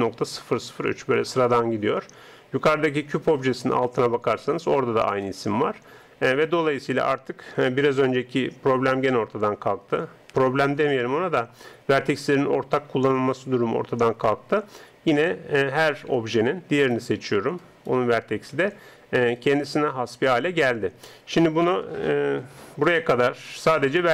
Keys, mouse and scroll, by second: 7.9 g, 16.3 Tab, 16.7-19.6 right drag, 17.3 Tab, 20.1 Tab.